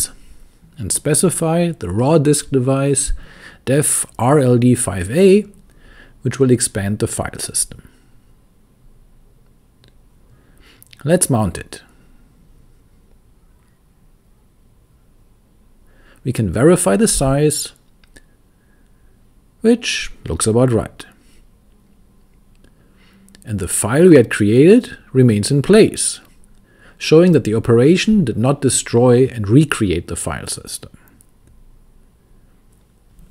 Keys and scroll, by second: 0.0-5.0 typing, 7.6 Return, 11.1-14.0 typing, 15.9 Return, 17.9-20.0 typing, 25.2-28.4 typing, 33.0-33.3 typing.